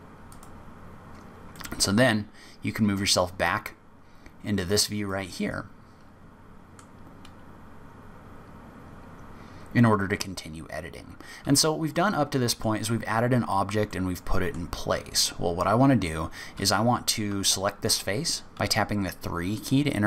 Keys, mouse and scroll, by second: 0.3 click, 1.5 middle click, 4.1-5.0 scroll up 5, 5.1 middle click, 9.5 scroll up 1, 11.5-11.9 scroll down 3, 11.9 middle click, 13.9 middle click, 17.2 3, 17.8 click.